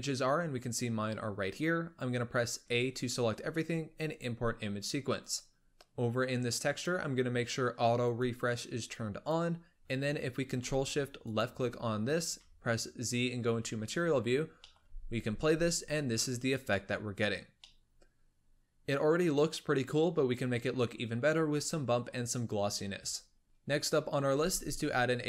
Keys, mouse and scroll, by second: 5.6 scroll up 2, 5.7-6.5 middle drag, 6.5-8.1 drag, 8.9 click, 9.5-11.1 scroll down 1, 11.1 ctrl+shift+click, 12.3 z, 14.2-14.6 scroll up 2, 14.6 middle click, 14.8 space, 17.0-17.6 scroll down 2, 17.6-23.4 middle drag, 23.4 shift+a, 24.3 shift+a.